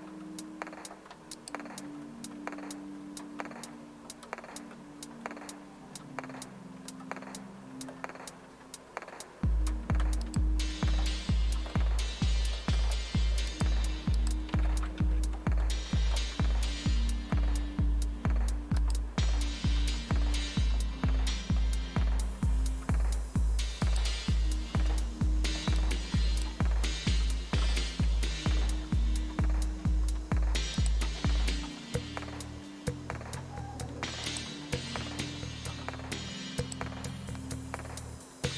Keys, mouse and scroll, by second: 1.4 click, 10.2 click, 13.5-15.0 drag, 14.5-15.0 typing, 18.8 click, 23.8 click, 25.8 click, 27.1-28.5 typing, 30.8 click, 34.3-35.0 drag, 36.6-37.3 drag.